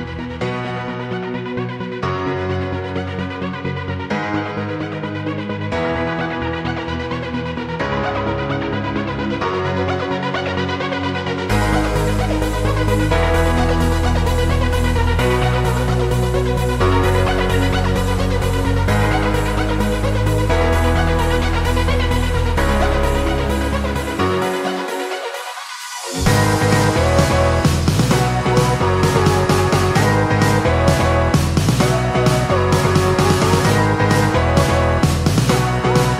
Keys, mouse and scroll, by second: 0.0-12.5 drag, 24.6 click, 26.1 shift+click, 26.6 shift+click.